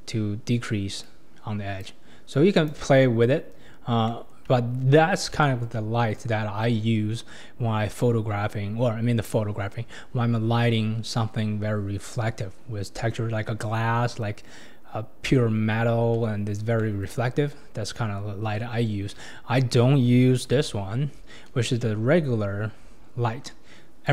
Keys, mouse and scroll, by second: 0.1 scroll up 3, 1.0-3.0 drag, 3.0-3.4 scroll down 4, 3.7-4.0 scroll down 3, 4.1-5.0 shift+middle drag, 5.0-5.4 scroll up 3, 5.4-6.0 shift+middle drag, 6.0-7.3 scroll up 1, 7.3-9.1 scroll down 2, 9.1-10.6 scroll down 1, 11.6-14.1 scroll down 2, 16.5 scroll down 2, 16.8 middle click, 17.3 scroll down 2, 18.3 scroll down 2, 18.5-19.1 middle drag, 19.1 KP_1, 20.5 shift+a.